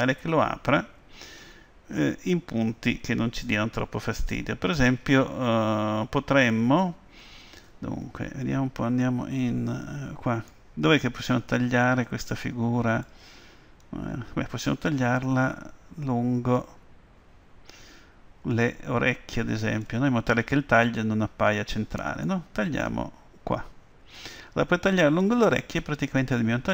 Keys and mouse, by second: 9.4 Tab, 10.6-12.4 middle drag, 14.7-17.9 middle drag, 22.3-24.5 middle drag, 24.6 Tab, 25.2-26.7 middle drag.